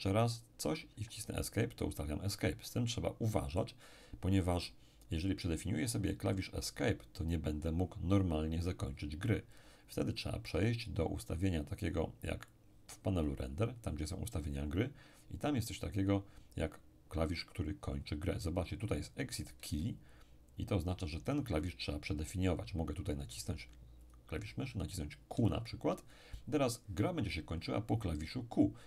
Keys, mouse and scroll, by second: 0.9 Escape, 12.5 click, 15.0-15.9 scroll down 1, 15.9-19.0 scroll down 1, 19.7-22.0 ctrl+middle drag, 24.0 click, 25.3 q.